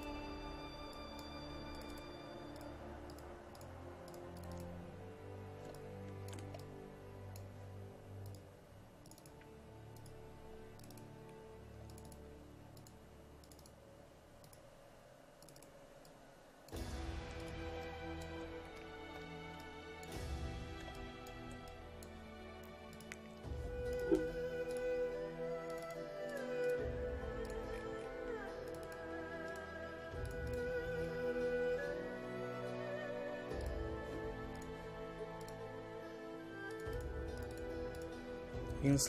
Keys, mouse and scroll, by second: 5.8-7.7 ctrl+drag, 11.3-11.9 scroll down 1, 11.9 click, 18.7 ctrl+scroll down 1, 19.6 ctrl+click, 20.5-20.8 scroll down 1, 21.0 ctrl+click, 21.7 click, 22.9 click, 27.8-28.7 scroll down 1, 28.7 click, 31.0-33.7 scroll down 1, 33.7 click.